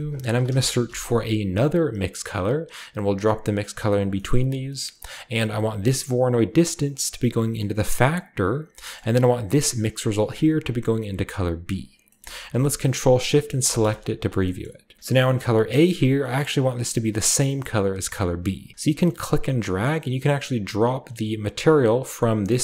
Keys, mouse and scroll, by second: 0.3 m, 0.4 i, 0.8 x, 2.0-3.5 drag, 3.6-8.5 drag, 4.0 scroll down 1, 4.0 typing, 4.2-5.6 scroll up 1, 4.7 middle click, 9.2 click, 10.2-11.6 drag, 13.5 ctrl+shift+click, 13.9 ctrl+shift+click, 14.6-16.1 drag, 14.6-16.1 middle drag, 14.6-16.1 scroll up 1, 16.1-18.3 scroll up 1, 16.3-18.3 middle drag, 19.2-22.6 drag.